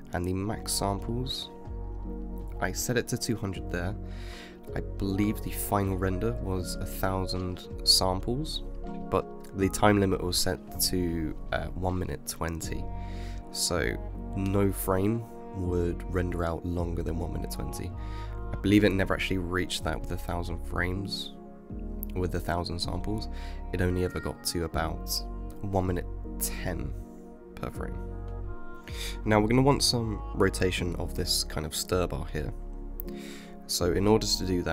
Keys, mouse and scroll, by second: 0.6 KP_0, 4.0-5.8 middle drag, 5.8 KP_0, 6.6 KP_0, 7.1 KP_0, 7.6 KP_0, 10.6 space, 12.6 space, 16.6 click, 17.5 click, 19.7 click, 21.2 click, 24.0 click, 28.4 click, 28.8 click, 32.2-32.8 scroll up 2.